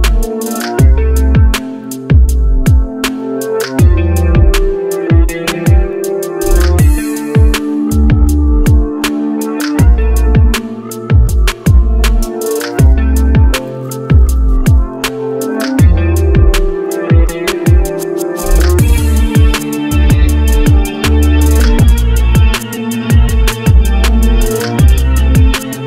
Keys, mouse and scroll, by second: 0.8-1.1 scroll down 1, 5.0 Delete, 6.5-6.9 scroll up 1, 9.0 ctrl+z, 11.5 scroll down 1, 12.3 scroll, 12.4 ctrl+s, 19.1-19.4 scroll up 1, 20.4-21.2 scroll up 1, 25.2-25.7 scroll down 1.